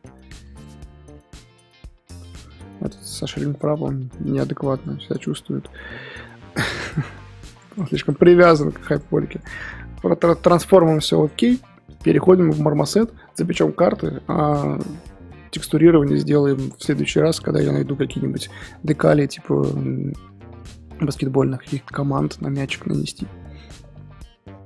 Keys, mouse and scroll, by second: 0.6 click, 1.0 g, 2.9-5.6 drag, 5.6 n, 7.6 click, 7.8 click, 7.9 click, 8.1 click, 8.3 click, 8.5 click, 8.7 click, 8.8 click, 11.4-24.6 middle drag.